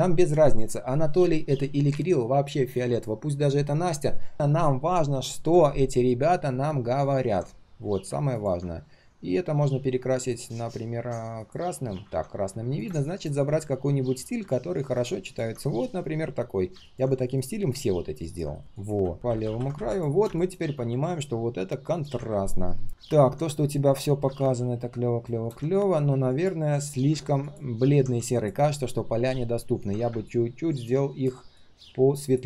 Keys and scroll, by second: 12.0 ctrl+z, 15.7 ctrl+alt+c, 17.2 ctrl+alt+v.